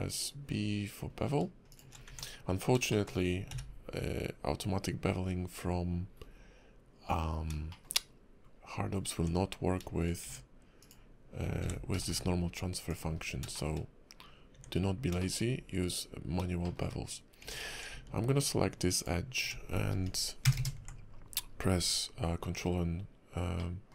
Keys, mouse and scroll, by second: 2.1 Tab, 2.4-2.8 scroll down 1, 2.9 shift+middle click, 3.5 q, 6.1-6.5 scroll up 1, 7.7 shift+middle click, 8.0 scroll up 1, 8.4-9.1 scroll down 1, 9.1 Tab, 10.2 Tab, 10.8 click, 11.6 f, 13.1 scroll down 1, 13.5 shift+middle click, 14.5 Tab, 15.2 shift+middle click, 15.4 scroll up 3, 16.6 shift+middle click, 17.4 Tab, 18.9 alt+click, 20.0 ctrl+KP_Add, 20.4 ctrl+KP_Add, 20.6 ctrl+KP_Add, 21.4 scroll down 4, 22.4-23.6 scroll up 6, 23.6 middle click.